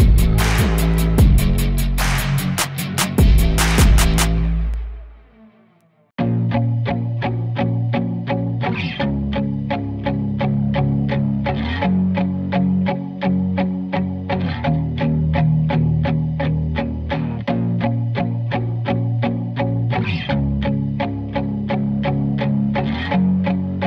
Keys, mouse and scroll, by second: 0.1 s, 0.3 g, 0.8 s, 0.9 alt+a, 1.0 click, 1.8 g, 2.0 alt+a, 2.1 ctrl+s, 2.2 click, 2.2 scroll up 4, 2.3 click, 2.8-3.9 drag, 3.9 a, 4.0-5.3 drag, 5.5 alt+a, 5.8-7.7 typing, 6.3-6.7 scroll up 3, 6.7 shift+click, 6.8 ctrl+l, 7.1 alt+a, 7.3 click, 7.6 scroll down 1, 8.3 click, 9.3 click, 9.4 click, 9.5 h, 10.4 alt+a, 11.0 right click, 11.1 scroll up 3, 11.1 alt+a, 11.6-13.2 typing, 11.9 click, 12.0 click, 12.3 click, 12.8 click, 13.1 scroll down 2, 13.5 scroll up 1, 13.9-14.7 scroll down 2, 14.0 click, 14.1 right click, 16.7-18.1 drag, 19.7 alt+a, 19.8 ctrl+s, 19.8 KP_0, 20.0 ctrl+s, 20.5-21.7 drag, 21.7 ctrl+s, 21.8-22.1 scroll down 3, 22.5 click, 22.9 s, 23.1 click, 23.4 shift+right click, 23.7 click.